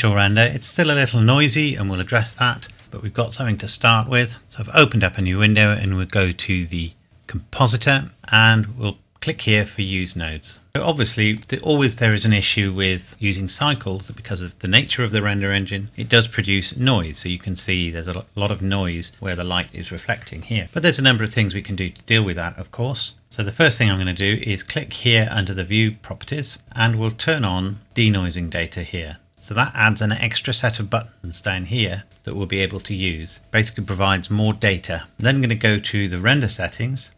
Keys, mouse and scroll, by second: 3.6 click, 4.4-5.1 scroll down 1, 5.1 click, 7.5 click, 8.2 n, 9.5 click, 10.2-10.7 scroll up 1, 11.4 click, 17.0-18.2 scroll up 1, 28.6 click, 35.2 click, 36.0-36.8 scroll down 1.